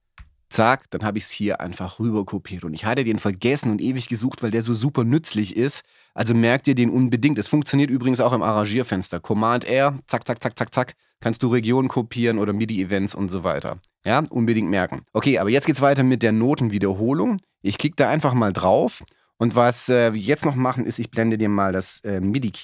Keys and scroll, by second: 0.2 super+r.